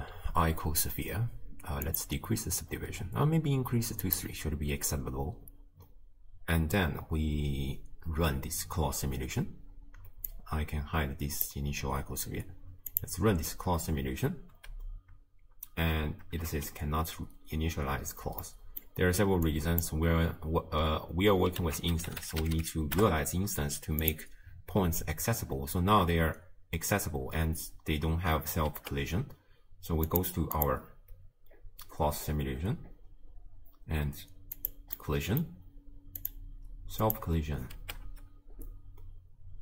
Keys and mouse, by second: 1.9 click, 4.1 click, 10.4 drag, 12.9 click, 14.5 space, 15.9 space, 16.5 shift+space, 18.4 click, 19.5 click, 21.6 ctrl+a, 24.9 space, 27.6 space, 28.7 shift+space, 30.1 click, 30.7 click, 34.6 click, 35.1 click, 36.2 click, 37.1 click, 37.8 shift+space.